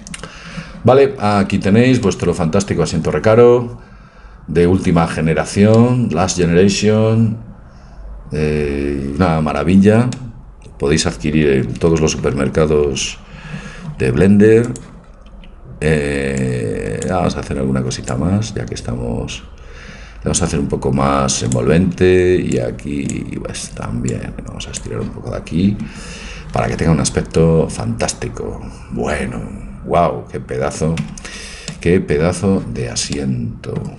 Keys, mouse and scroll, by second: 10.2-11.3 middle drag, 13.1 a, 14.7-16.6 drag, 15.3 b, 18.1 click, 21.8 a, 22.1 b, 24.1 click, 26.0 a, 31.1 Tab.